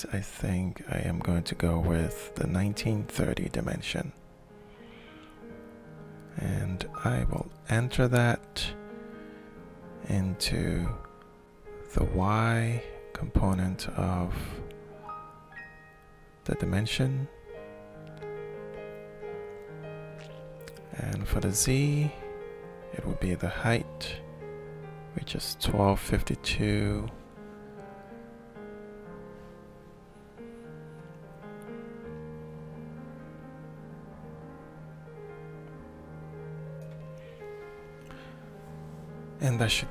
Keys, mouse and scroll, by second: 10.7 click, 15.2-16.7 alt+shift+drag, 18.9 click, 27.1 click, 36.1 click, 38.2 click, 39.4-39.9 alt+shift+drag.